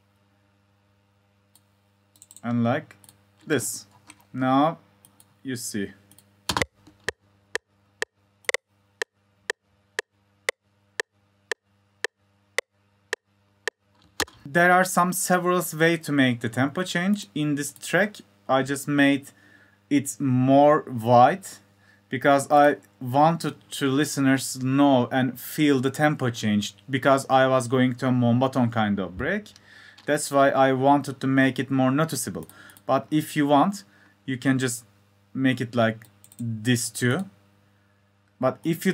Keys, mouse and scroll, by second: 5.4 F1, 5.9 click.